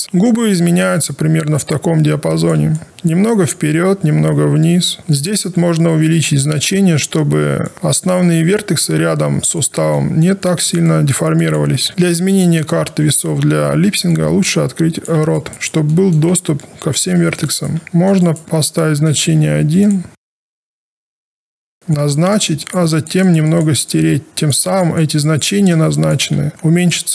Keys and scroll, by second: 13.0 e.